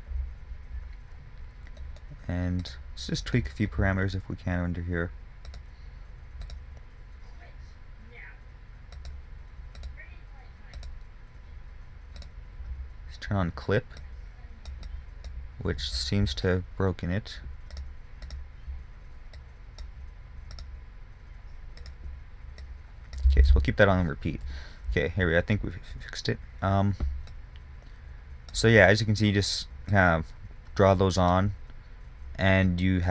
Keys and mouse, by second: 5.8-9.2 drag, 18.0-23.0 drag, 23.8 ctrl+z, 25.0 KP_1, 25.5 middle click, 26.0 middle click, 27.7-32.1 drag, 32.1-33.1 middle drag.